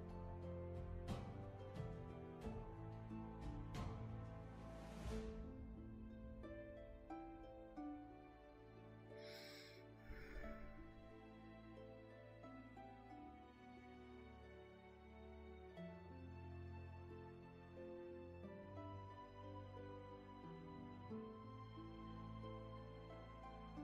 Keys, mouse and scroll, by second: 0.1 space, 0.8-1.9 scroll up 1, 1.9 space, 3.9 space, 6.7 ctrl+z, 11.2 ctrl+z, 20.4 ctrl+z.